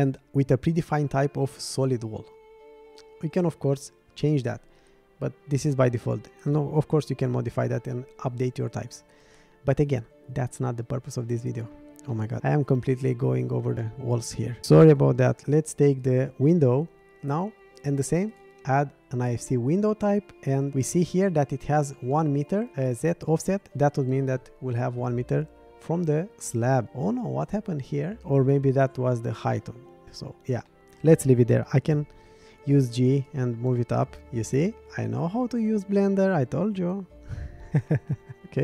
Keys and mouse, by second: 12.1 middle drag, 13.8 middle click, 15.3 shift+click, 16.0 click, 18.3 click, 26.4 click, 26.8-29.9 middle drag, 30.0 middle click, 30.7-31.0 middle drag, 31.9 g, 34.0-35.3 middle drag.